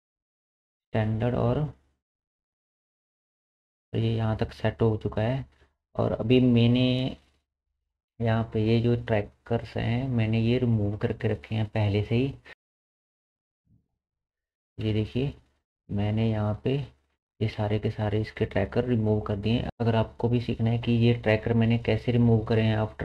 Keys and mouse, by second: 0.8-12.5 middle drag, 12.5-23.0 drag, 17.4 space.